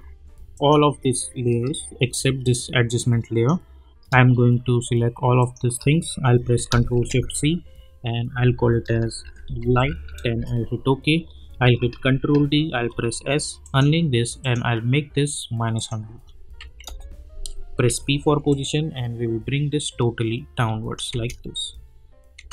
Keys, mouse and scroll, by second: 0.5 click, 2.4-4.1 drag, 5.4 shift+click, 7.0 ctrl+shift+c, 9.0-10.4 typing, 11.5 ctrl+d, 12.7 s, 13.6 click, 16.6 -, 16.8 Return, 17.8 p, 18.5-21.1 drag, 21.1 space.